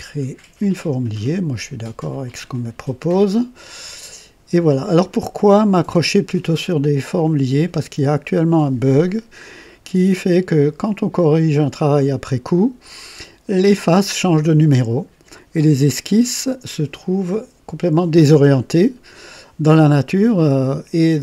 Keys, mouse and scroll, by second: 0.5 click, 2.2 click, 3.6-4.8 drag, 9.0 scroll down 2, 9.6-10.4 right drag.